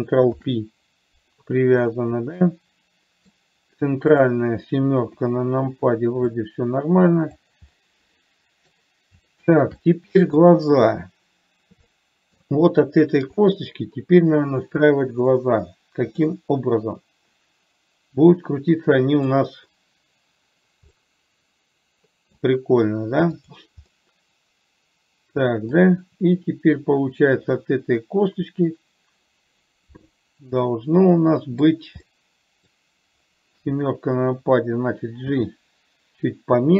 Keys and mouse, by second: 0.7 ctrl+p, 2.2 click, 2.7 middle click, 5.6 KP_7, 6.8-7.8 drag, 8.1-9.1 middle drag, 9.7 shift+middle click, 10.2 middle click, 12.2 middle click, 16.6-19.6 middle drag, 21.3-22.7 middle drag, 24.3-26.1 middle drag, 31.1-32.1 middle drag, 32.4 middle click, 33.8 KP_7, 35.7 g.